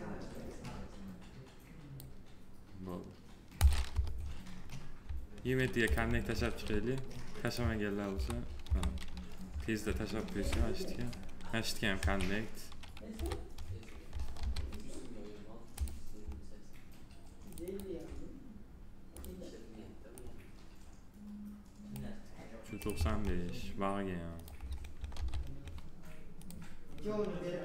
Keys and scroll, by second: 3.7 p, 7.9 F4, 10.1 f, 11.7 2, 14.1 alt+r, 24.9 alt+r.